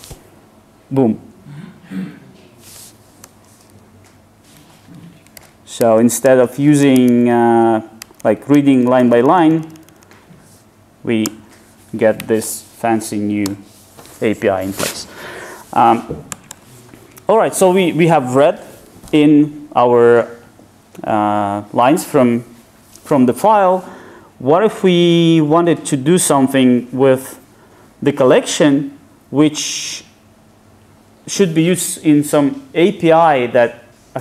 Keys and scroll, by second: 4.9 super+z.